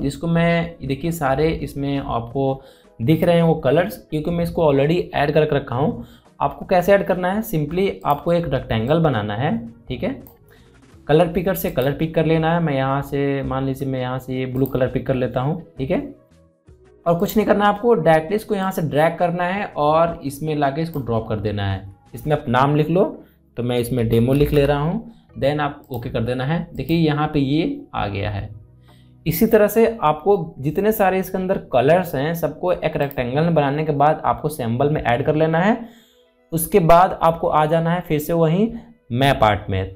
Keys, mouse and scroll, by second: 8.8-12.4 drag, 15.3-24.7 drag, 24.7-25.2 typing, 26.4 click, 33.6 click, 33.7 click.